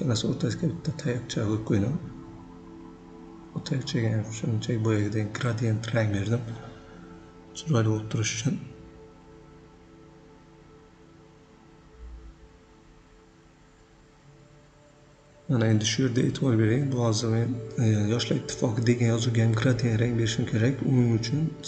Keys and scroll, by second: 1.4 Escape, 6.7 ctrl+a, 6.9 9, 7.0 Return, 11.9 Return.